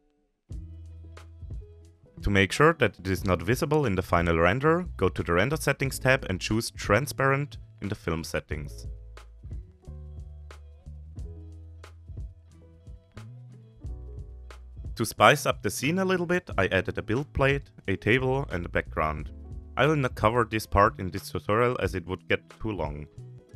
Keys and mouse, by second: 0.0-0.7 shift+middle drag, 9.5 click, 12.3 click, 15.2 shift+middle click, 15.4 alt+h, 16.0 KP_7, 16.1 g, 16.4 middle click, 16.6 shift+middle click, 17.0 KP_1, 17.3 shift+middle drag, 17.7 middle click, 17.9 middle click, 18.0 ctrl+s, 18.6 middle click, 19.0 shift+middle click, 20.0 click, 20.4 click, 20.6 click, 20.7 Delete, 20.9 click, 22.3-23.5 typing.